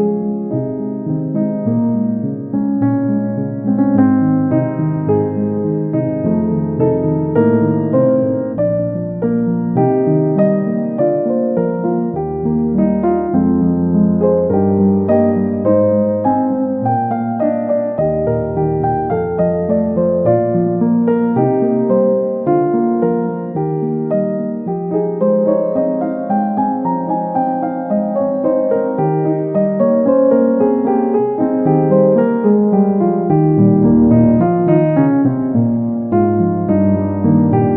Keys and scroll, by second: 23.0 ctrl+d.